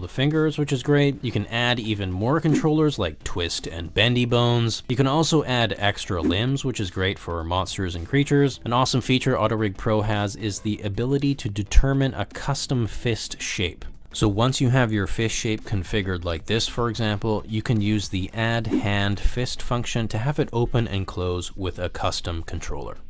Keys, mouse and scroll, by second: 0.6 s, 2.9-5.7 drag, 6.3-8.5 drag, 9.7 click, 15.5 click, 17.1 drag, 17.9 s, 21.0 click, 21.1-22.4 middle drag.